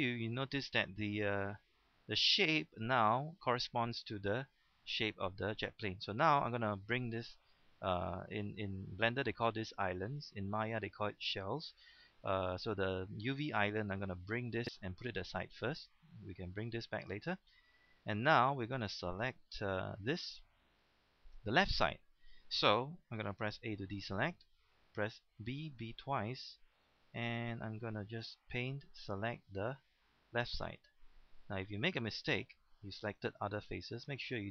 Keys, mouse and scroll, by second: 1.5 g, 2.7 click, 13.7 g, 15.8-16.8 drag, 17.4-18.0 scroll down 1, 18.8-19.6 scroll up 1, 19.8 shift+middle click, 20.6 shift+scroll up 1, 22.9 shift+middle click, 24.0 a, 25.4 b, 25.8 b, 26.7-31.0 drag, 31.7 right click, 32.2 scroll up 1, 33.4 shift+middle click, 33.8 scroll up 1.